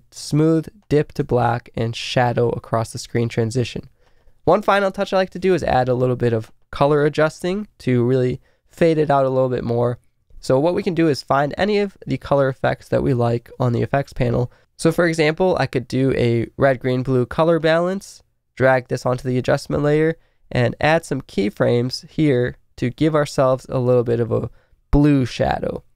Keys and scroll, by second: 0.2 space, 3.1 space.